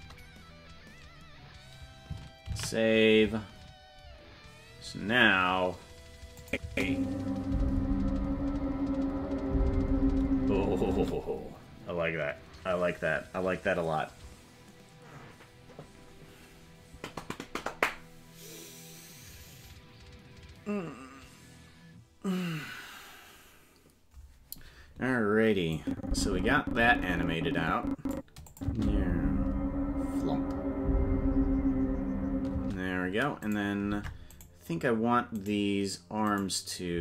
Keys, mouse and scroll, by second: 4.9 ctrl+s, 6.4 click, 6.6 space, 11.0 space, 25.7-28.1 drag, 28.5 click, 28.7 space, 32.5 space, 33.5 right click, 33.9 ctrl+Tab, 34.4 right click, 35.4 right click, 36.4 right click.